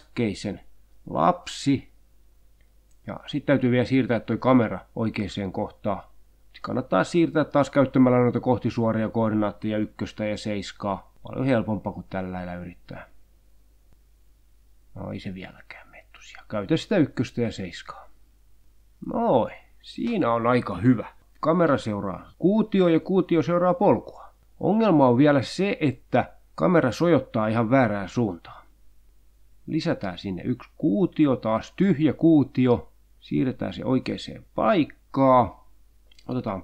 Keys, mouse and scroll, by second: 1.4 click, 3.2 click, 5.0 click, 5.7 click, 6.4 click, 7.0 click, 8.0 click, 8.2 click, 8.7 click, 9.1 click, 10.5 click, 11.2 click, 12.5 click, 12.7-13.9 drag, 14.0 7, 14.5 click, 15.0 click, 15.5 click, 16.2 click, 17.0 1, 17.3 click, 18.0 click, 18.5 click, 18.7 0, 18.8 Return, 19.5-20.8 drag, 22.2 middle click, 24.2-28.4 drag, 29.6 shift+a, 31.9-32.4 drag, 32.9 s, 34.0 click, 35.3 g.